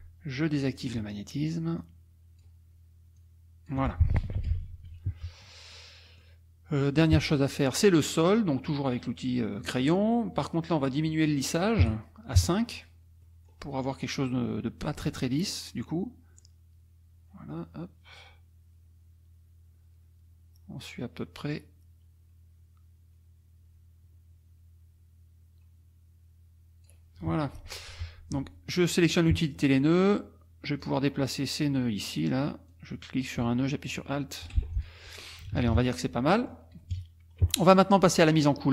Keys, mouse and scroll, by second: 0.8 click, 1.8 click, 3.2 click, 4.4 F1, 4.5 KP_Subtract, 5.5 click, 6.1 click, 7.3 middle click, 7.3-7.7 scroll up 2, 9.6 click, 11.1 click, 11.8 KP_5, 12.4 KP_Enter, 13.2 middle click, 14.3 middle click, 16.4-18.2 drag, 18.2-19.5 scroll down 2, 27.6 F2, 29.0 click, 30.8-32.0 drag, 32.7 click, 34.6 alt+F1, 34.7 alt+click, 35.4 KP_Subtract, 36.3 click, 36.9 KP_Subtract, 37.4 click, 38.3 click.